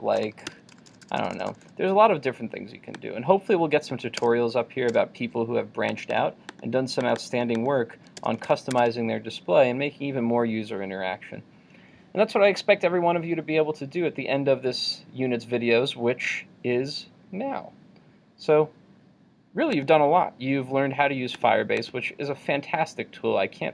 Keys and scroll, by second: 8.5 super+s, 8.9 super+Tab.